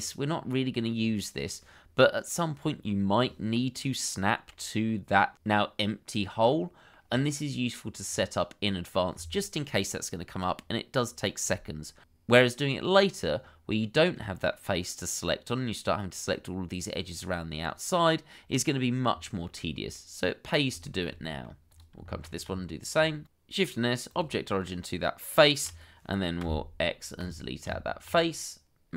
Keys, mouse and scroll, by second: 0.9-2.0 scroll down 1, 4.5 middle click, 6.5 middle click, 12.1 middle click, 14.0-14.6 scroll up 1, 14.6 middle click, 19.9 middle click, 20.8 shift+middle click, 21.2 middle click, 22.0 shift+middle click, 22.4 Tab, 23.2 shift+s, 27.6 Tab.